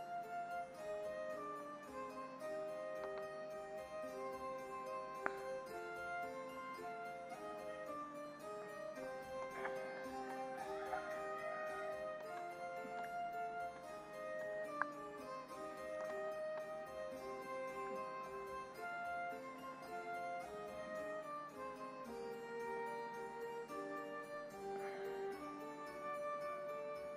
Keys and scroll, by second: 3.0 ctrl+alt+z, 6.1 ctrl+=, 8.6 ctrl+=, 9.4 space, 10.9 ctrl+-, 12.2 space, 16.0 space, 17.0 ], 19.2 ], 24.9 ctrl+-.